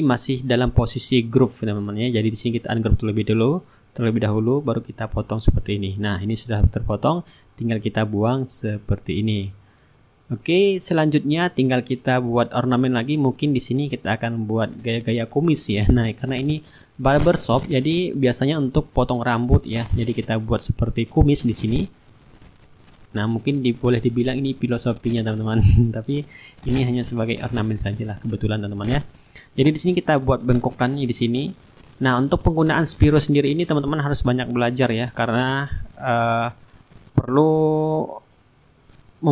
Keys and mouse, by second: 1.1-3.8 drag, 4.6-8.6 drag, 8.3 Delete, 8.8 middle click, 9.7 shift+click, 9.9-11.7 shift+right drag, 11.9-13.8 middle drag, 15.1 click, 16.2 click, 17.6 click, 19.8-20.9 middle drag, 24.3 click, 27.1 click, 28.4 click, 29.6 click, 30.9 click, 32.3 click, 33.6 Return, 36.1 click, 38.5 click.